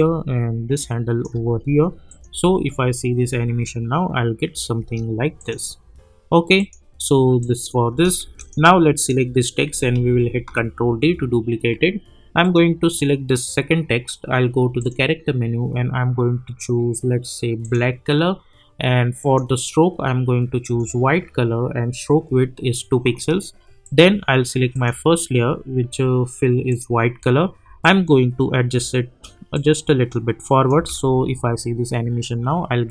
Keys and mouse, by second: 2.3 space, 4.7 space, 5.4 click, 7.9 space, 8.4 click, 10.3 ctrl+d, 12.4 click, 14.8 click, 17.6 click, 23.8-30.4 drag, 30.7 space.